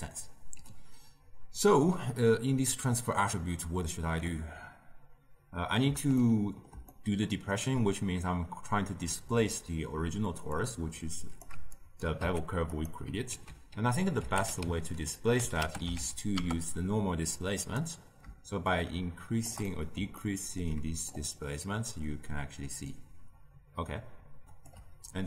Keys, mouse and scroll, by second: 6.1-10.5 ctrl+middle drag, 10.5 click, 11.7 shift+right click, 12.1 g, 13.2 ctrl+a, 18.6 shift+click, 19.6-21.1 middle drag, 21.1-24.1 shift+drag.